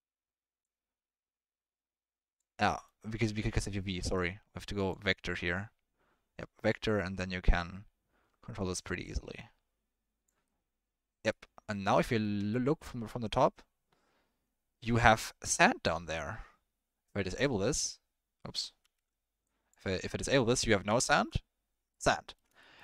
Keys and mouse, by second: 0.7-3.1 drag, 6.9-10.3 drag, 11.2-11.9 middle drag, 12.5-12.8 middle drag, 17.1 click, 18.9 ctrl+z, 19.4 click, 21.1 ctrl+z, 21.9-22.4 middle drag, 22.6 shift+middle drag.